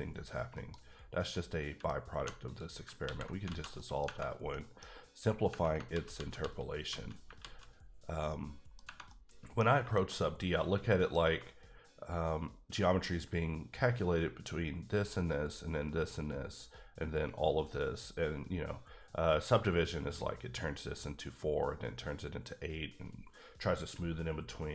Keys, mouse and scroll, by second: 0.5 KP_Decimal, 0.9-1.3 scroll down 1, 1.3 middle click, 2.1 2, 2.4 click, 3.0 ctrl+x, 3.4 alt+z, 3.7 middle click, 4.0-4.5 scroll down 2, 4.5 middle click, 5.9 ctrl+z, 6.1 ctrl+z, 6.8 ctrl+z, 7.4 ctrl+z, 8.3 middle click, 9.1 middle click, 9.6 scroll up 2, 9.9 shift+middle click.